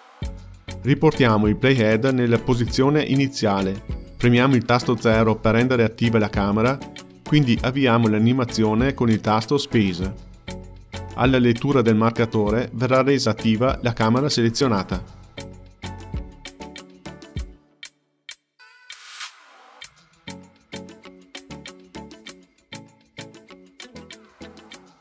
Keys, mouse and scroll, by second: 0.4 space, 3.3-5.1 drag, 5.1 KP_0, 5.1 KP_0, 6.7 space.